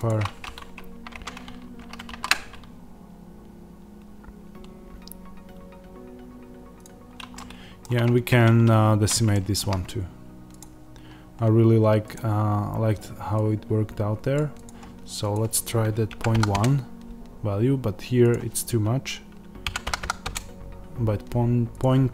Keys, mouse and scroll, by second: 0.0-6.7 drag, 1.0 Tab, 1.6 a, 7.2-12.0 middle drag, 7.9-8.2 scroll, 8.2 Tab, 12.0-22.1 drag, 16.5 KP_Enter, 20.1 KP_1, 20.2 KP_Enter.